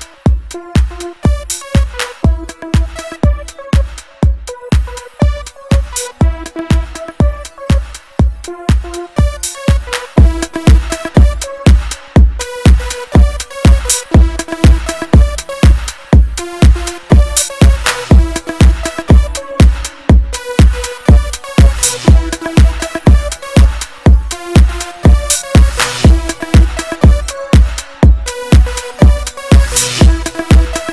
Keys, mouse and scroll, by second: 1.8 click, 1.9 click, 4.8 click, 5.7 click, 6.8-7.8 ctrl+scroll down 3, 9.3 a, 12.1-12.7 ctrl+scroll up 2, 18.4 click, 19.2 click, 21.6 click, 23.2 click, 25.4 click, 26.1-26.9 typing, 27.9 click, 29.0 click, 30.2 click.